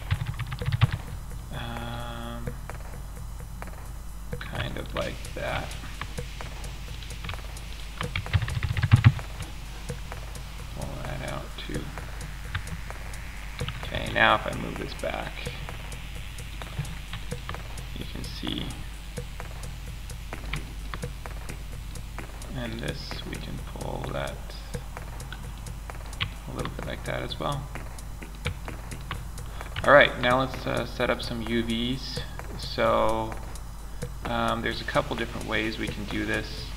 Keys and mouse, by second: 0.5-1.2 middle drag, 4.6 middle click, 5.2 click, 6.3-7.0 right drag, 7.7 ctrl+KP_Add, 11.9 Tab, 13.3 m, 19.4-22.0 drag, 23.3-24.5 middle drag, 24.5 click, 25.1-27.2 middle drag, 30.5-31.3 middle drag.